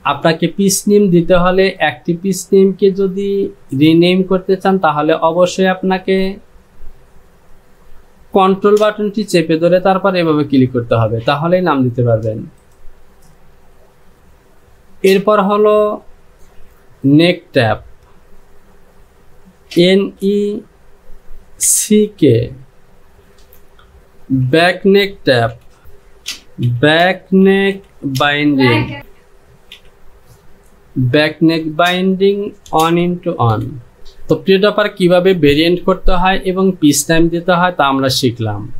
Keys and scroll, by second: 19.8 n, 20.2 e, 25.5-29.8 typing, 33.0 x, 33.6 KP_1, 34.0 Return.